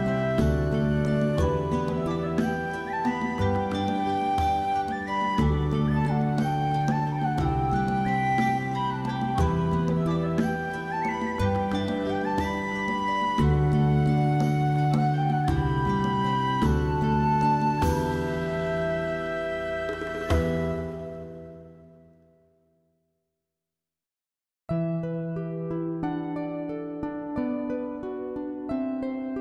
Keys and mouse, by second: 0.0 s, 0.6 click, 0.8 middle click, 1.0 alt+middle click, 1.2 alt+middle click, 1.7 shift+middle click, 1.9 g, 2.2 click, 2.6 click, 2.8 g, 3.1 click, 3.5 Tab, 3.6 alt+middle click, 3.8 alt+z, 3.9 shift+middle click, 4.4 shift+middle click, 4.9 shift+middle click, 5.1-6.4 middle drag, 6.5 alt+middle click, 6.8 alt+middle click, 7.1 Tab, 7.2 shift+middle click, 7.9 g, 8.0 g, 8.2 middle click, 8.7 middle click, 9.2 middle click, 9.6 Tab, 9.7 middle click, 9.9 alt+middle click, 10.3 shift+middle click, 10.6 middle click, 11.0 shift+middle click, 11.1 middle click, 11.7 Tab, 11.8 middle click, 12.2 click, 12.4 shift+click, 12.8 j, 13.0 middle click, 13.5 click, 14.4 j, 14.6 middle click, 15.1 click, 15.3 alt+middle click, 15.5 middle click, 15.7 middle click, 15.9 middle click, 16.1 alt+middle click, 16.4 shift+middle click, 16.7 g, 17.0 click, 17.2 shift+middle click, 17.5 click, 17.7 g, 18.0 click, 18.4 click, 18.6 g, 18.9 click, 19.0 middle click, 19.7 middle click, 20.0 middle click, 20.2 middle click, 21.0 shift+click, 21.3 middle click, 22.4 j, 22.6 middle click, 23.6 click, 24.0 j, 24.2 middle click, 24.9 click, 25.0 middle click, 25.3 middle click, 25.8 alt+middle click, 26.0 alt+z, 26.3 g, 26.7 click, 26.9 middle click, 27.3 Tab, 27.4 middle click, 27.8 alt+z, 28.1 alt+middle click, 28.3 alt+middle click, 28.5 shift+middle click, 28.9 middle click.